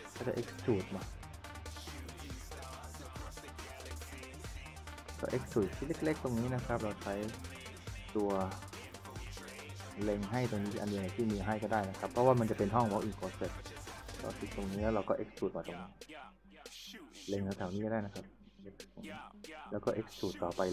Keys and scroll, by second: 11.7-12.9 typing.